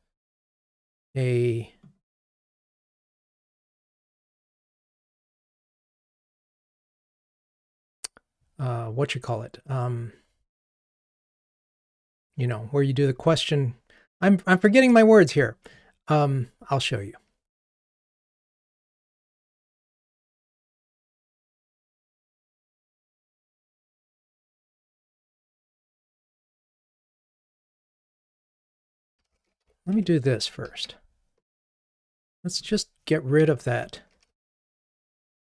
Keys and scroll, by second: 28.2 BackSpace, 28.3 Delete, 30.0 Escape, 33.5 Delete, 34.6 Delete.